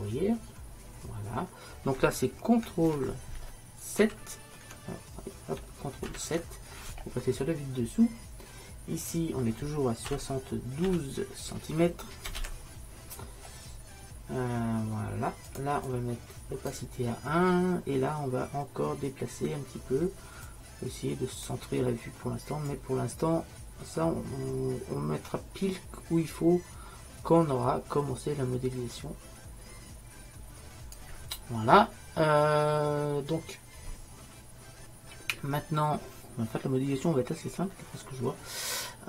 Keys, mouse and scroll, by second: 0.0-1.2 drag, 4.1 ctrl+n, 9.2-11.0 drag, 15.9-17.7 drag, 20.5-22.5 drag, 22.8-24.7 drag, 25.0-39.0 middle drag.